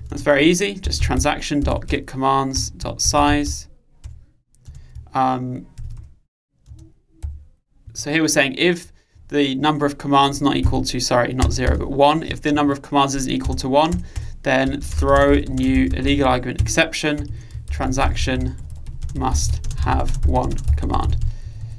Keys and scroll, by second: 4.6 Return, 18.6 Return.